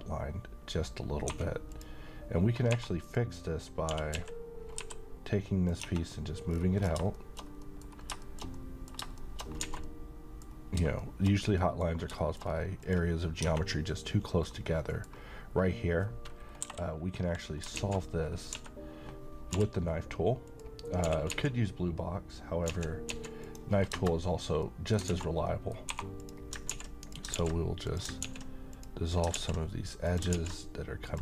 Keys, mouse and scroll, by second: 1.3 2, 1.7 click, 2.7 3, 3.1 click, 3.9-4.8 typing, 5.7 click, 5.8 Tab, 6.5-6.9 scroll down 1, 7.1 shift+middle click, 7.9 scroll down 1, 8.2-9.1 middle click, 9.6 a, 9.8-10.5 alt+middle click, 10.5 scroll up 1, 11.0 shift+middle click, 11.9 scroll up 1, 12.1 middle click, 12.4-12.8 scroll up 1, 12.8 click, 13.4 Tab, 14.4 scroll down 1, 14.7-15.3 middle drag, 17.8 alt+z, 18.3 scroll down 1, 18.5 a, 19.6 k, 20.5 click, 21.0-21.3 typing, 22.7-23.1 typing, 23.4 click, 24.6-25.2 middle click, 25.1 alt+z, 25.4 scroll up 1, 25.5 middle click, 25.9 2, 26.2 click, 26.7 x, 27.0 click, 27.3 ctrl+x, 27.9 click, 28.2 x, 28.7 click, 29.3 ctrl+x, 30.0 click, 30.3 ctrl+x, 31.0 click.